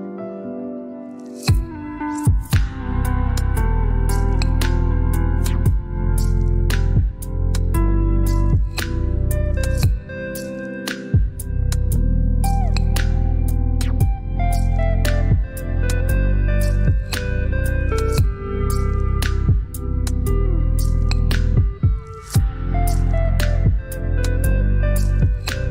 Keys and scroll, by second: 3.2 ctrl+z.